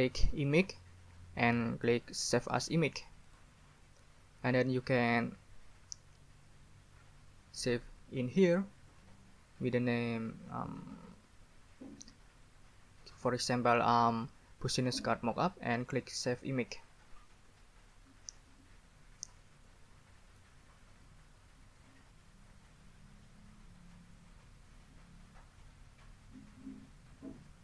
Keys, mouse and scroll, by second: 0.5 click, 3.2 click, 17.7 Escape.